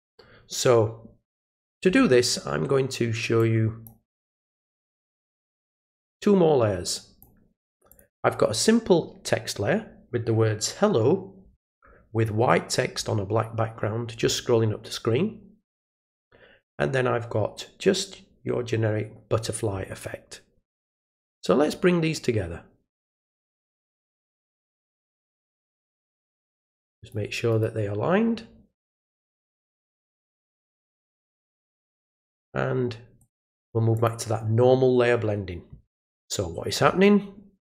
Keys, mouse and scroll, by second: 3.4-3.8 drag, 4.5 click, 6.1-7.2 drag, 7.9 click, 16.1 click, 21.3-24.2 drag, 26.4 click, 27.5 right click, 29.7 click, 32.1 click, 33.2 click, 33.9 click.